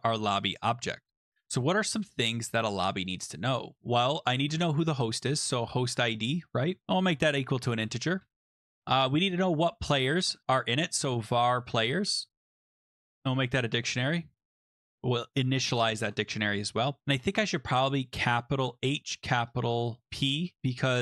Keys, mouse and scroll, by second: 0.2 click, 2.2 click, 2.9 Return, 3.8-7.7 typing, 7.8 Return, 8.2 Return, 9.6-14.2 typing, 14.4 Tab, 15.4 Tab, 15.6-16.4 typing, 17.5 click, 18.3 Delete, 18.6-21.0 typing, 19.7 Right, 19.9 Down, 20.0 Right, 20.2 Right, 20.9 Up.